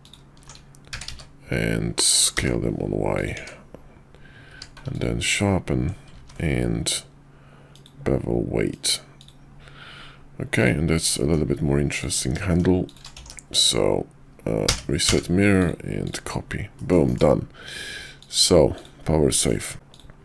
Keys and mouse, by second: 0.0 alt+shift+click, 0.9 s, 3.3 Tab, 4.5 q, 6.1 ctrl+`, 10.6 click, 11.1 middle drag, 11.9 click, 12.5 shift+middle click, 12.9 shift+click, 13.1 alt+x, 15.6-16.1 drag, 16.7 middle drag, 17.0 KP_5, 18.2-19.0 drag, 19.3 middle drag, 19.7 `.